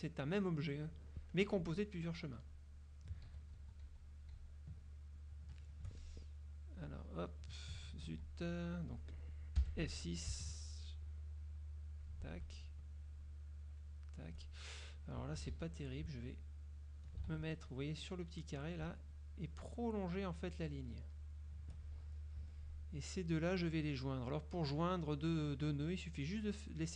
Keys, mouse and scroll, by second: 1.4 F2, 3.4 ctrl+z, 5.1 ctrl+click, 6.1 ctrl+shift+click, 6.8 click, 8.1 ctrl+z, 9.7 F6, 10.7-12.4 shift+drag, 13.3-14.1 shift+drag, 15.6 ctrl+z, 16.2 ctrl+shift+z, 16.5 shift+click, 17.4 ctrl+shift+z, 19.4-21.4 shift+drag, 22.5 F2, 23.6 click, 24.2 click, 25.5-26.9 drag.